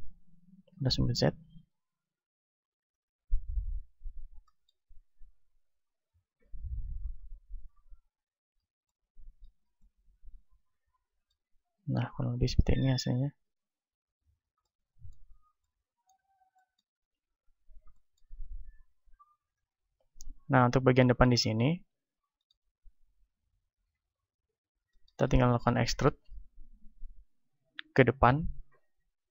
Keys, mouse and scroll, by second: 2.8-4.8 drag, 4.3-6.3 middle drag, 5.4 click, 6.1-8.0 right drag, 6.9-8.0 drag, 8.7 z, 8.9-11.6 middle drag, 9.3 z, 11.6 right click, 13.9-16.7 drag, 13.9-15.2 right drag, 16.7-19.1 middle drag, 16.9 KP_1, 18.9 ctrl+Tab, 19.9-23.8 right drag, 20.9-28.4 middle drag, 23.8 KP_3, 28.4 e.